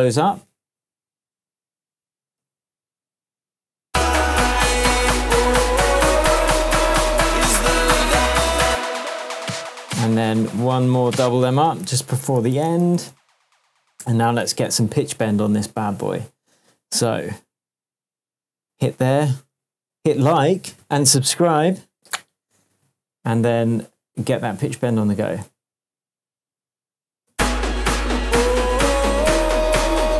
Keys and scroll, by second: 0.0 super+d, 8.6 space, 10.4 BackSpace, 11.7 super+d, 14.4 shift+super+d, 14.6 shift+super+Tab, 15.2 shift+Tab, 27.3 space.